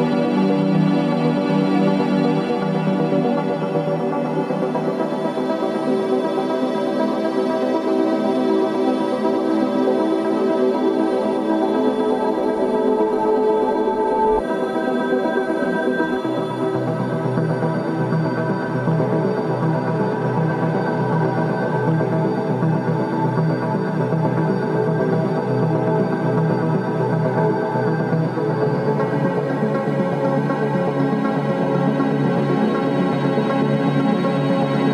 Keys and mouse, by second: 1.1 h, 1.9 alt+z, 5.5 click, 6.5-10.1 middle drag, 10.3 ctrl+z, 10.7 ctrl+z, 12.2 ctrl+z, 13.1 ctrl+z, 14.2 ctrl+z, 16.5 ctrl+z, 23.2 s, 31.9-34.9 middle drag.